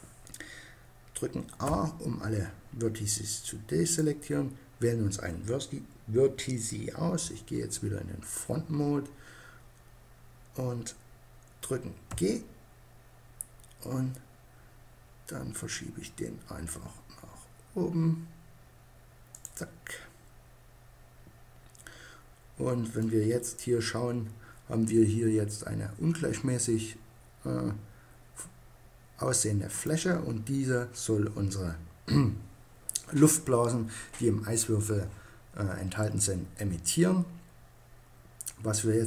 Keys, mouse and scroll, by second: 1.2 a, 3.3-5.1 right drag, 6.7 KP_1, 8.6-11.6 middle drag, 11.6 g, 19.0-20.7 drag, 22.5-24.5 middle drag.